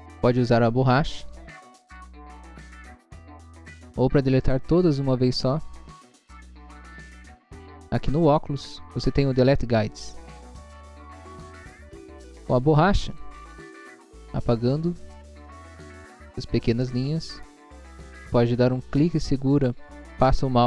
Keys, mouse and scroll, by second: 0.5 click, 1.2 click, 1.7 click, 1.9 click, 2.2 click, 2.6 click, 3.3 click, 3.6 click, 6.3 click, 10.1 click, 13.1 click, 14.0 scroll up 1, 14.6 scroll up 1, 14.8 click, 15.0 click, 15.4 scroll down 1, 16.0 scroll up 1, 16.7 click, 17.1 scroll down 1, 17.7 scroll down 1, 17.9 scroll up 1, 18.6 scroll up 1, 19.0 click.